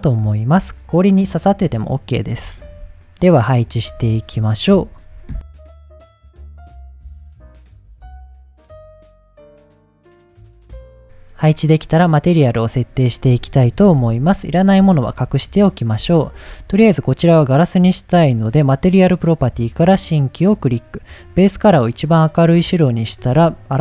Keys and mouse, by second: 0.1-0.5 middle drag, 0.9-1.9 middle drag, 3.3-3.7 drag, 4.7-8.8 typing, 6.2 click, 7.4 middle click, 7.8 click, 9.5 drag, 9.7 middle drag, 9.9 click, 10.1 middle click, 11.0 Delete, 12.3-13.0 drag, 13.8 h, 15.0 shift+middle click, 15.6 click, 16.2 shift+middle click, 21.0 click, 22.5 click.